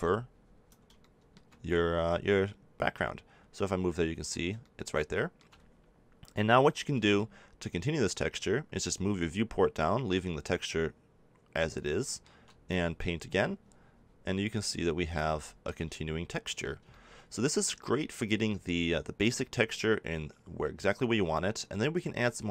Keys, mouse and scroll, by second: 1.0-7.1 middle drag, 12.6-14.6 drag, 15.3 middle click, 21.5-22.5 middle drag.